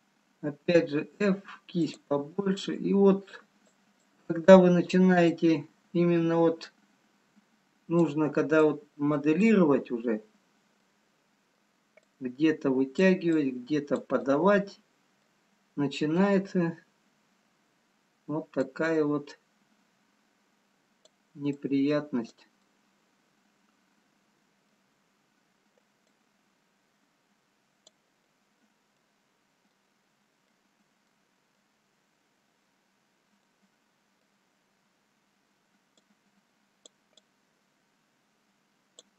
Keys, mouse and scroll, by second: 0.9 f, 2.8 click, 4.1 click, 8.7 click, 10.3-10.9 scroll up 3, 10.8 middle click, 12.2 click, 15.4 click, 15.4 middle click, 16.6-17.1 scroll down 1, 18.8 click, 21.7 click, 22.7 middle click, 25.2 scroll down 3, 26.3 click, 28.3 middle click, 31.1 middle click, 31.1-31.4 scroll down 1, 32.0-32.8 scroll up 2, 32.8-33.3 scroll down 1, 33.6 middle click, 36.4 click, 37.3 click.